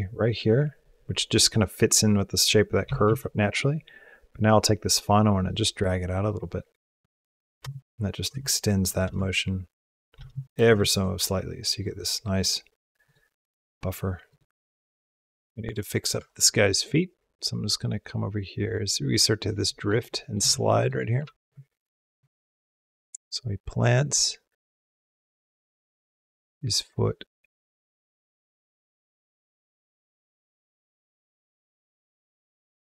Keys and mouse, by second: 0.0-0.7 drag, 2.7 g, 7.6 space, 8.2 space, 8.7 click, 8.8 space, 10.0 space, 10.5 space, 10.7 click, 11.8 click, 12.9 click, 14.2 click, 15.0 space, 15.2 click, 15.9 Tab, 16.7 click, 17.7-19.4 drag, 19.7 middle click, 19.7 click, 20.0 shift+click, 20.0 shift+middle click, 20.3 ctrl+middle click, 20.8 middle click, 21.1 shift+middle click, 22.0-29.9 drag, 30.2-31.8 middle drag.